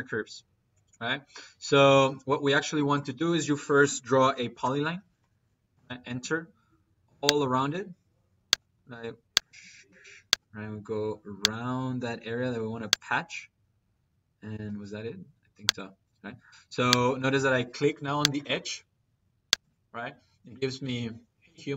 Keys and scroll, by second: 1.8 Escape, 3.4 Escape, 4.0-5.6 typing, 14.4 c, 14.7 space, 18.4 Escape.